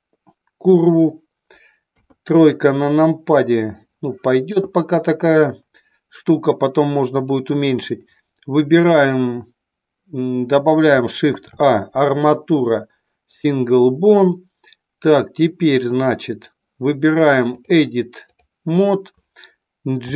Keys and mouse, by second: 2.0 KP_3, 7.0 click, 8.8-9.3 drag, 11.2 shift+a, 17.4-18.4 drag, 19.9 g.